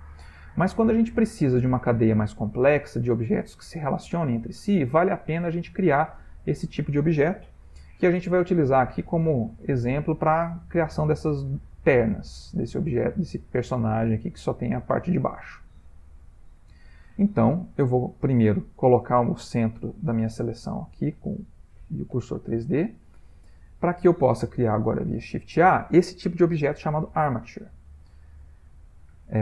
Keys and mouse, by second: 0.4 ctrl+middle click, 3.8 middle click, 4.0 middle click, 4.7-5.0 shift+middle click, 4.8 shift+middle click, 4.9 middle click, 6.4 click, 8.2 middle click, 8.3 middle click, 9.0 middle click, 9.5 middle click, 9.8 middle click, 9.9 middle click, 11.3 middle click, 12.5 ctrl+middle click, 13.2 shift+middle click, 13.6 middle click, 17.3 middle click, 19.6 shift+s, 22.3 middle click, 22.5 middle click, 22.7 middle click, 22.9 middle click, 23.1 middle click, 23.4 ctrl+middle click, 25.1 shift+a.